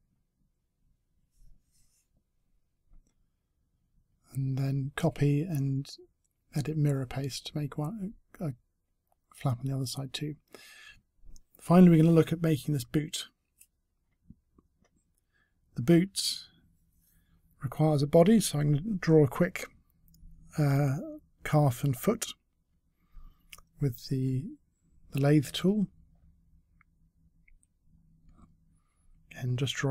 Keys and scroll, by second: 3.6 ctrl+c, 5.9 space, 24.3 space.